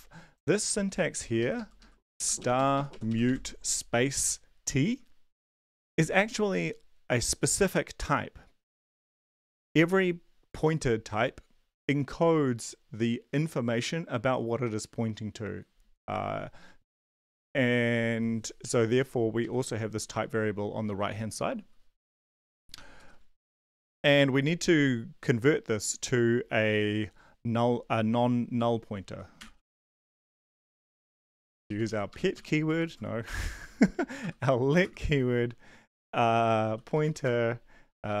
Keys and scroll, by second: 1.4 ctrl+Left, 1.5 ctrl+Left, 1.7 ctrl+Left, 2.4 shift+Right, 2.5 shift+Right, 2.7 shift+Right, 20.1 shift+Left, 21.6 Down, 22.9 Return, 23.5 Down, 23.6 Tab, 29.1-30.0 typing, 30.2 Up, 30.5 ctrl+Left, 30.9 Down, 31.2 ctrl+Right, 31.6 Left, 31.8 Left, 32.1-32.9 typing, 33.4 Down, 33.6 Up, 34.2 End, 34.8 space, 35.3 ctrl+s, 36.4-38.2 typing, 38.1 Left.